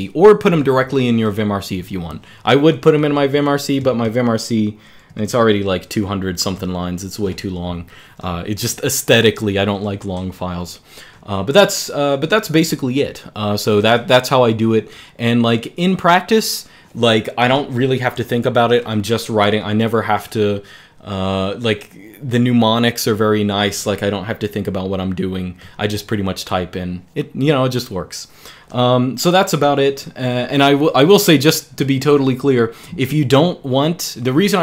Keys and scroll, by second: 2.9 super+l, 3.6 shift+g, 4.8 g, 5.0 g, 5.7 j, 6.5 ctrl+d.